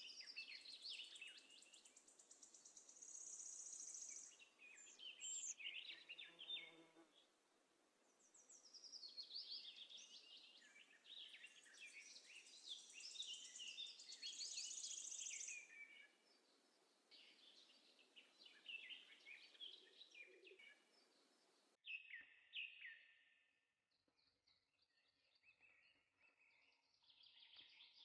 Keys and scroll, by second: 10.4 z.